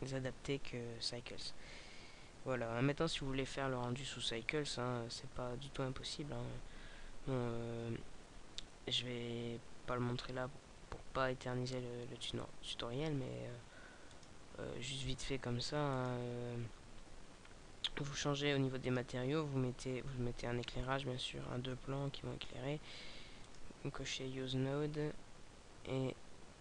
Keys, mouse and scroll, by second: 14.5 click, 19.4 click, 24.0 click.